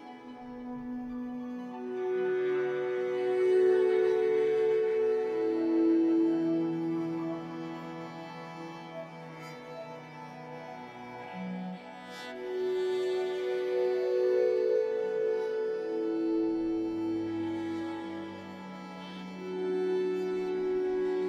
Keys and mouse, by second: 10.2 click, 10.9 click, 12.1-13.5 drag, 13.5 1, 13.7 click, 14.6 g, 16.5 click, 16.6 g, 18.5 g, 20.5 click, 20.7 g.